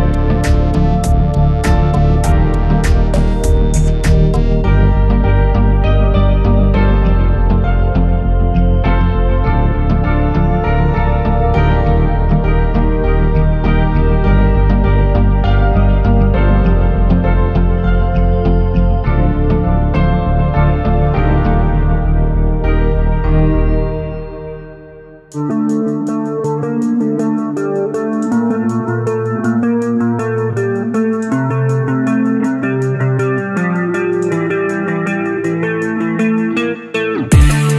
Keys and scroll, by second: 5.6 alt+c, 7.3 typing, 8.8 typing, 18.4-20.5 typing, 26.3 alt+c.